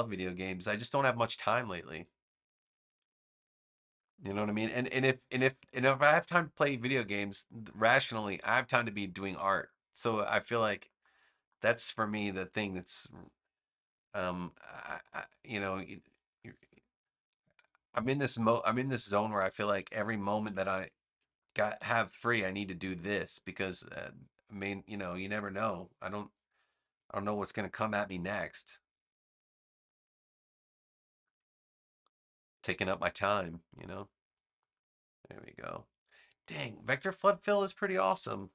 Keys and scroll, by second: 20.3 super+=, 21.5 space, 22.4 a, 38.0 super+-.